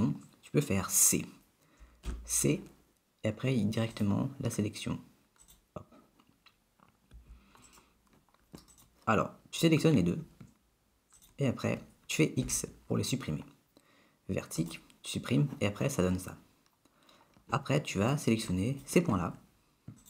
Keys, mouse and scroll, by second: 2.1 c, 8.7 click, 9.7 click, 11.2 shift+click, 11.5 shift+click, 12.5 x, 16.2-16.9 scroll up 3, 18.6 click.